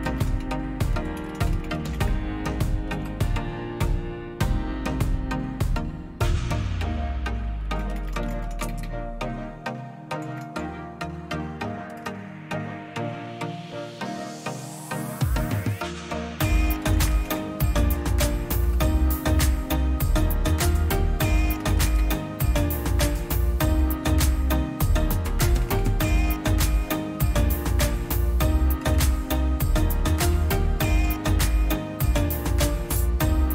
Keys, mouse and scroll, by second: 0.0-3.2 typing, 7.3-12.4 typing, 16.3-17.6 typing, 18.5 Return, 21.0-22.4 typing, 23.6 typing, 25.5-31.6 typing.